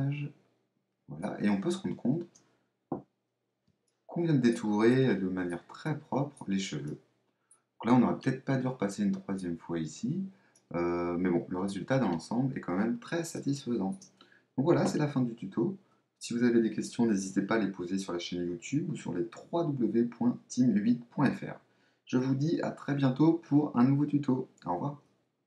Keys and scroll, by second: 2.8 super++, 14.8 super+-.